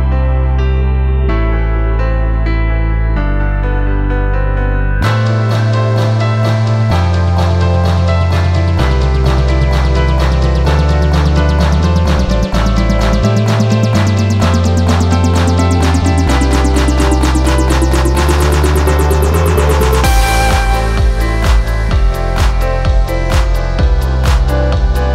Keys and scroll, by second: 8.0 space, 11.1 space, 22.3 space.